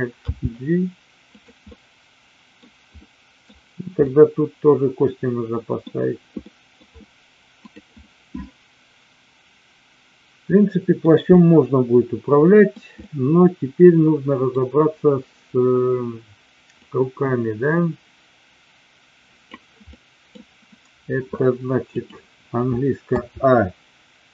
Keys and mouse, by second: 0.4 g, 1.4 click, 1.6-2.6 middle drag, 2.9-3.5 middle drag, 4.0-5.9 middle drag, 6.4 middle click, 8.0-10.9 middle drag, 11.4-12.7 middle drag, 13.0-14.4 middle drag, 16.7-19.6 drag, 19.9-20.4 middle drag, 21.9 click, 23.1 a.